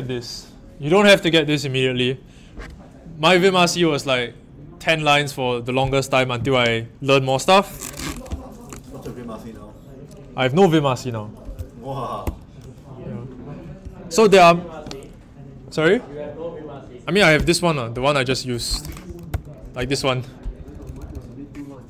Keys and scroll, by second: 12.2 ⋮, 19.0-21.1 typing, 19.3 Return.